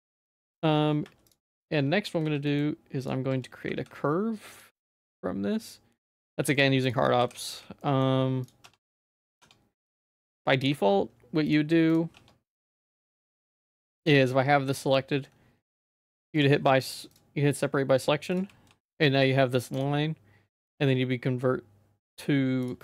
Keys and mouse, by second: 0.4 2, 1.2 shift+click, 2.2 z, 2.4 middle click, 3.0 ctrl+click, 3.6 q, 7.2 h, 7.4 z, 7.8 middle click, 8.9 Tab, 9.0 middle click, 9.4 Tab, 11.4 click, 12.1 Tab, 13.0 middle click, 13.3 z, 13.7 middle click, 14.0 g, 15.8 p, 16.4 Tab, 18.7 g, 19.8-22.7 right drag.